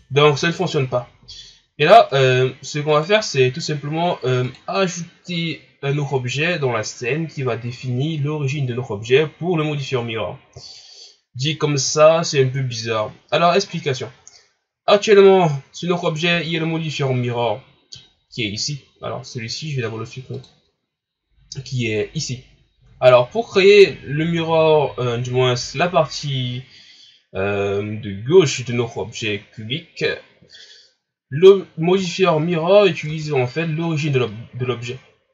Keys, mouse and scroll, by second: 0.2-1.0 ctrl+scroll down 1, 1.0 ctrl+scroll down 2, 2.1 right click, 2.9 right click, 4.5 click, 13.6-14.3 ctrl+scroll up 4, 16.3 Tab, 20.4-23.3 drag, 23.9-25.9 scroll up 5, 25.9-26.6 ctrl+scroll down 2, 31.4-32.0 scroll up 1, 32.0 scroll up 1, 32.1-32.4 scroll down 1, 32.4-33.1 scroll up 1, 33.1 Tab.